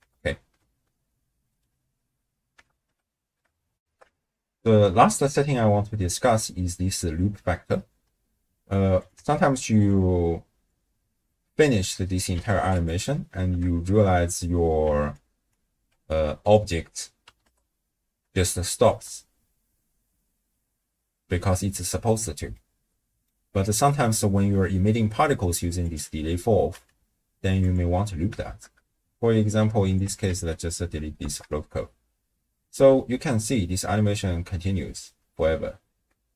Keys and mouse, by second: 0.1 shift+space, 2.0 space, 2.7 shift+space, 3.8 ctrl+alt+shift+q, 9.0 click, 9.8-12.8 drag, 15.2 ctrl+alt+click, 16.6 click, 19.0 shift+space, 21.3 space, 22.7 click, 25.9-27.6 drag, 28.4 shift+space, 29.8 click, 30.3 ctrl+x, 31.2 shift+space, 31.8 space, 35.4 space.